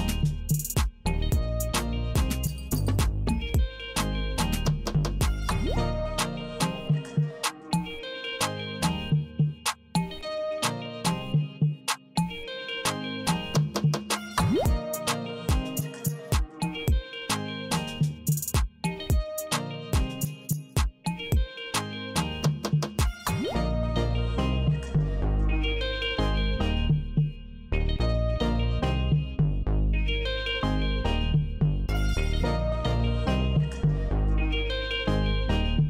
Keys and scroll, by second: 1.4 Left, 2.6 Left, 3.7 Left, 4.9 Left, 6.0 Left, 7.1 Left, 8.1 Left, 9.2 Left, 10.1 Left, 11.2 Left, 12.7 Left, 14.7 alt+F4, 20.9 Return, 25.4 space, 32.8 Return.